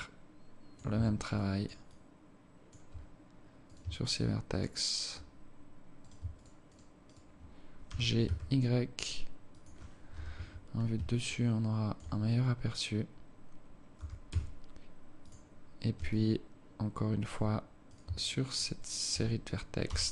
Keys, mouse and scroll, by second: 0.1 alt+click, 1.0 Tab, 1.4 alt+click, 1.9 alt+click, 3.7 right click, 4.1 shift+right click, 4.6 right click, 6.1 right click, 6.4 shift+right click, 6.7 right click, 7.1 shift+right click, 7.9 g, 10.2 KP_7, 11.3 alt+shift+click, 12.3-12.9 scroll up 2, 14.1 g, 16.1 alt+click, 17.9 right click, 18.3 shift+right click, 18.5 right click, 18.9 right click, 19.9 g.